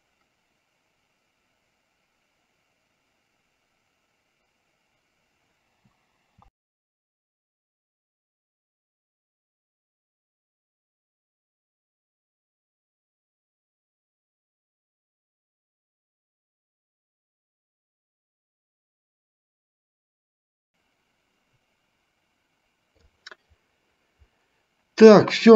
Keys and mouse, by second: 20.7-23.4 drag.